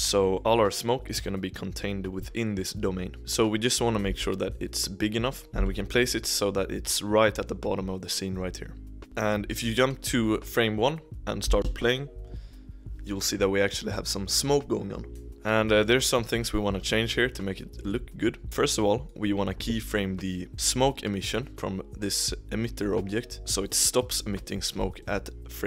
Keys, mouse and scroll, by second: 4.0 s, 5.4 scroll down 2, 5.5 KP_1, 9.0-11.0 middle drag, 11.1-11.5 scroll down 1, 11.5 space, 15.3 scroll up 1, 15.5-17.8 middle drag, 17.8 click, 18.4-21.5 drag, 21.5-25.0 shift+middle drag, 25.0-25.6 drag.